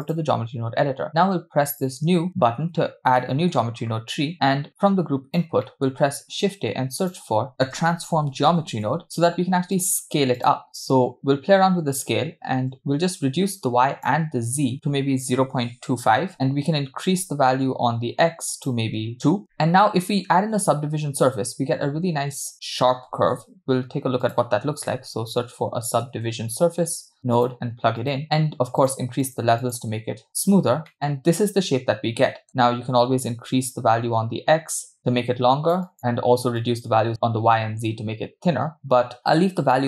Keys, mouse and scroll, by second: 1.7-2.3 drag, 3.2 middle click, 4.5-6.0 drag, 10.7 middle click, 13.4-16.7 shift+drag, 18.9 click, 19.5 middle click, 28.8 click, 29.2 click, 29.6 click, 31.8-32.6 middle drag, 34.9-36.0 shift+drag, 36.8-39.2 shift+drag.